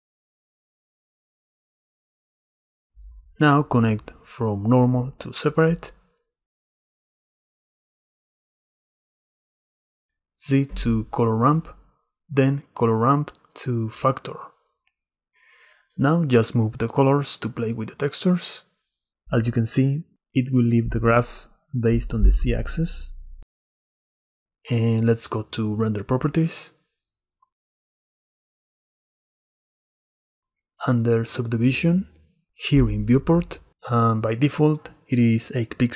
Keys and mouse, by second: 3.8 click, 4.1-5.6 drag, 6.3 middle click, 7.9-9.0 drag, 10.2 click, 10.5-12.1 drag, 12.2 click, 13.6-15.5 drag, 16.4 click, 16.8-18.8 drag, 19.1 click, 20.0 click, 22.3 shift+middle click, 22.6 middle click, 23.4 click, 24.4 shift+click, 24.5 middle click, 26.6 click, 31.5 click.